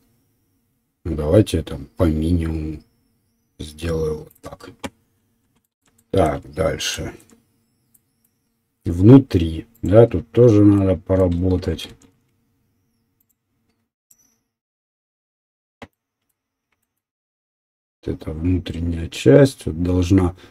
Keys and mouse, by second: 9.7 click, 9.8-13.2 middle drag, 11.8 shift+z, 13.2 click, 13.3 middle click, 14.0 click, 14.1-17.7 middle drag, 17.7-19.5 right drag.